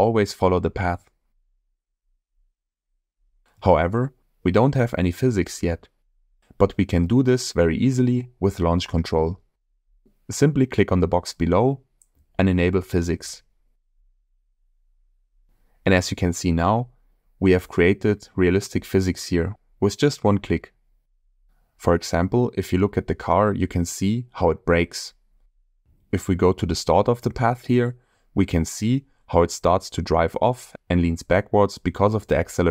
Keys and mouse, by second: 6.1 middle click, 6.6 middle click, 8.5 Tab, 9.8-11.0 shift+middle drag, 13.4 click, 17.7-18.6 shift+middle drag, 18.8-19.3 middle drag, 20.2 shift+middle drag, 31.2 space.